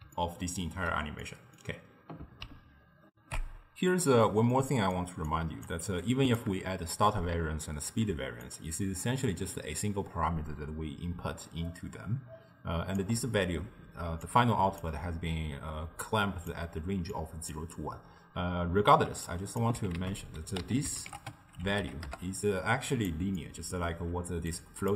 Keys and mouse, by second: 3.2 ctrl+alt+shift+q, 4.6 middle click, 5.4 click, 5.9 g, 8.5-11.7 shift+drag, 14.2 d, 14.3 click, 14.9 d, 15.9 d, 16.1 click, 16.7-17.0 d, 17.2 click, 17.6 d, 17.8-19.0 right drag, 19.0 d, 19.1 d, 19.3 click, 20.0 ctrl+a, 23.4-24.6 middle drag, 24.6 drag.